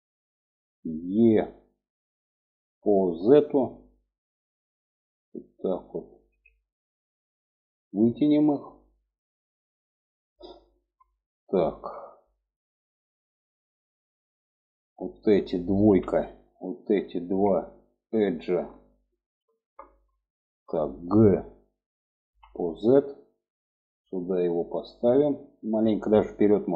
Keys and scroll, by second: 1.1 e, 15.4 2, 21.8 g.